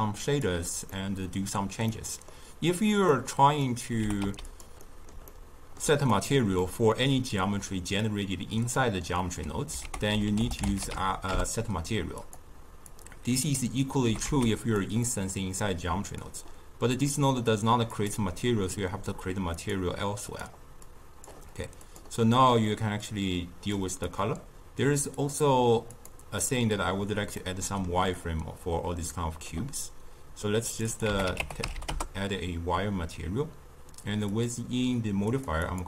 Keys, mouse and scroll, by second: 0.2 click, 0.8-3.1 middle drag, 3.1-3.9 drag, 3.9 g, 4.7-6.0 middle drag, 6.0 click, 6.5-9.7 middle drag, 11.7 ctrl+a, 12.8-13.9 drag, 13.9 g, 14.9-16.1 middle drag, 16.1 click, 17.9-22.2 drag, 24.0 click, 25.2-27.3 drag, 27.3-30.4 middle drag, 30.6 click, 30.8-33.8 drag, 34.2 click, 35.2-35.6 drag.